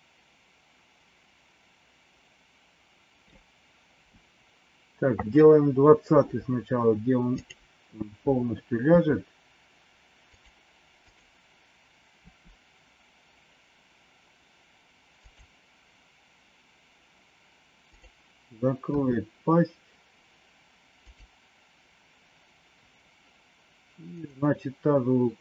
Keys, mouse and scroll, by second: 8.9 r, 10.9 click, 12.2 r, 17.8 click, 18.9 r.